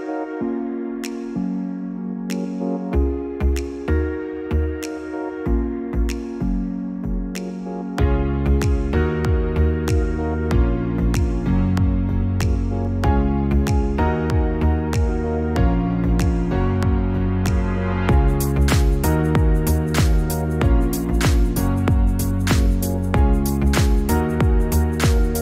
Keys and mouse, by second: 1.6-14.9 drag, 17.7 click, 22.9 click, 23.9 click.